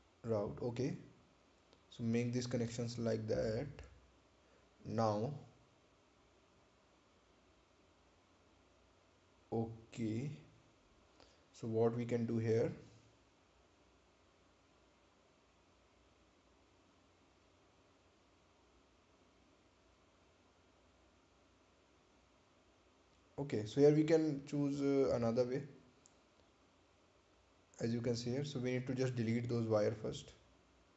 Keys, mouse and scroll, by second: 1.3 scroll down 1, 2.0 scroll up 1, 16.4 click, 22.5 right click, 28.7 click.